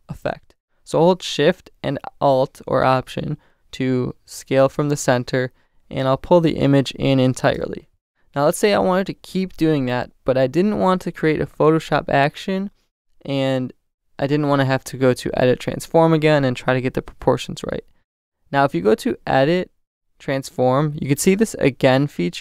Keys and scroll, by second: 7.6 alt+shift+Return.